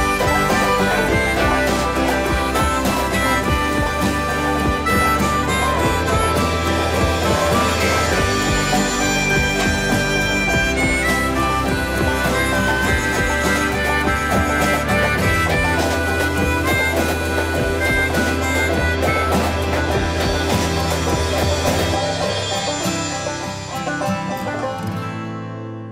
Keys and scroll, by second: 9.3 m, 14.7 space, 23.4 m, 25.1 space, 25.1 Escape.